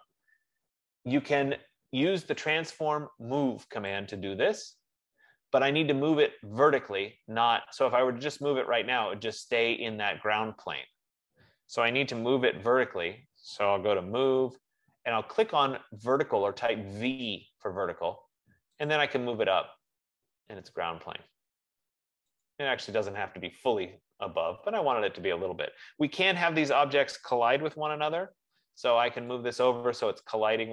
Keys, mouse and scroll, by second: 2.9 click, 4.4 click, 8.8 click, 12.2 Escape, 13.8-14.8 typing, 17.8 click, 19.3 click, 25.7-27.7 drag, 27.7-28.7 typing, 30.2-30.7 drag.